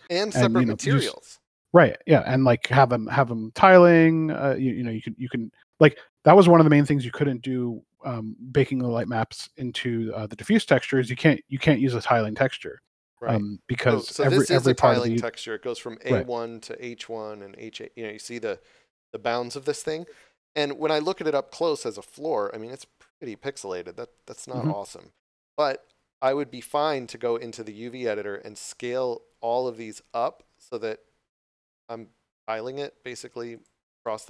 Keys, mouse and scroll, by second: 3.1 middle click, 3.6 shift+middle click, 4.3 middle click, 8.3 middle click, 21.9 scroll up 1, 24.9 scroll down 1, 28.6 s, 33.5 click.